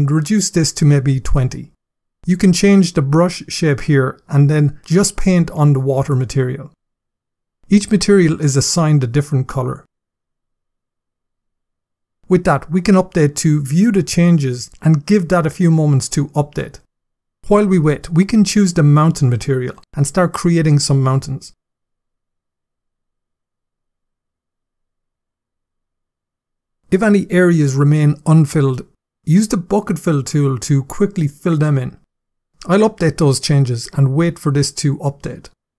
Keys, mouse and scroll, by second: 4.9 click, 13.1 click, 17.8 click, 19.7 click, 28.6 click, 29.6 click, 32.8 click.